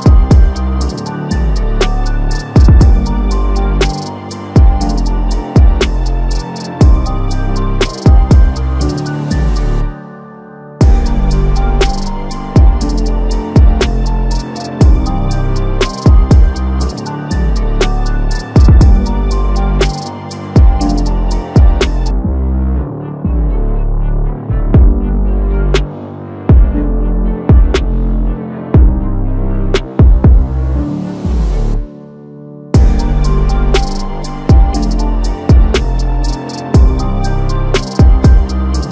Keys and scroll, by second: 8.6 alt+Tab, 9.3 ctrl+c, 9.5 alt+Tab, 9.9 ctrl+v, 11.1 ctrl+t, 12.9 shift+Left, 13.0 shift+Left, 18.8 ctrl+t, 20.2 ctrl+shift+t, 21.3 ctrl+z, 25.2 ctrl+alt+t, 37.1 ctrl+z, 38.8 ctrl+alt+shift+t.